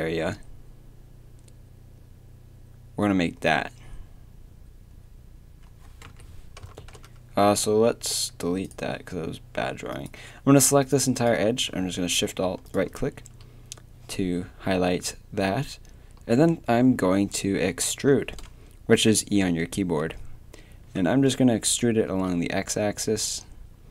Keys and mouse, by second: 6.8 ctrl+z, 11.1 middle click, 11.5 a, 16.4-19.4 middle drag, 19.4 e.